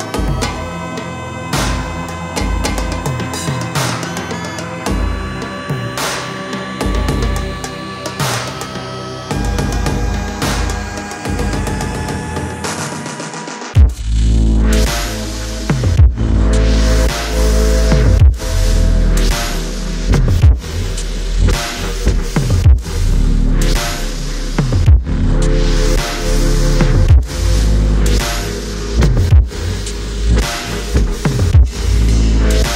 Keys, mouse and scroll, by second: 2.7 shift+click, 7.7 shift+click, 18.7-20.8 typing, 21.0-21.5 alt+scroll up 1, 27.4-28.4 alt+scroll down 1.